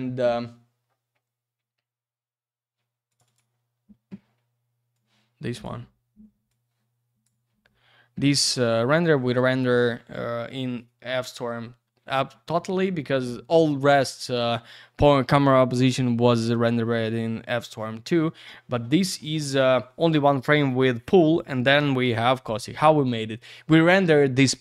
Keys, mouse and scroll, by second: 2.8 scroll down 1, 3.1 click, 3.1 click, 3.2 click, 3.3 double click, 4.9 click, 6.5 click.